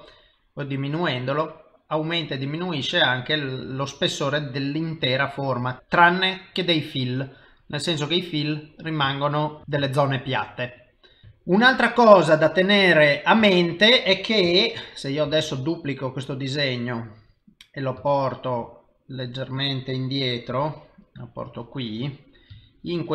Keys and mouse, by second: 0.9 click, 8.3 middle click, 9.2 ctrl+middle click, 9.6 shift+middle click, 9.9 shift+middle click, 10.5 middle click, 11.3 shift+middle click, 11.8 middle click, 13.2 click, 13.5 shift+middle click, 15.2 shift+d, 18.0 ctrl+middle click, 18.2 ctrl+s, 18.8 middle click, 20.6 g, 21.8 middle click, 22.6 ctrl+middle click.